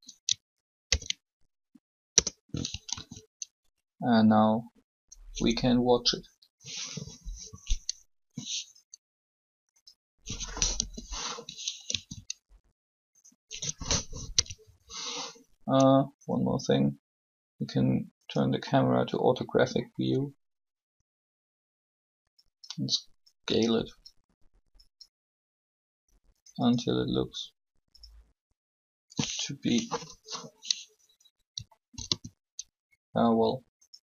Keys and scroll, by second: 0.8 ctrl+shift+p, 2.2 Return, 2.9 alt+a, 10.6 5, 11.6 alt+a, 14.0 0, 29.6 1, 32.0 alt+shift+a.